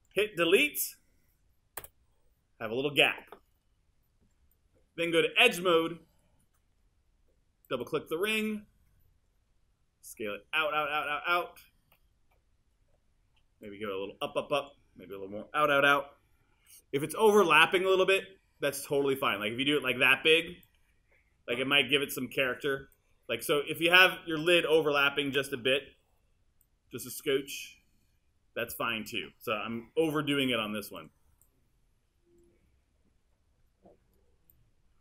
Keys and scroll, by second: 1.8 BackSpace, 12.9 w, 16.6 r, 25.9 w, 27.9 w.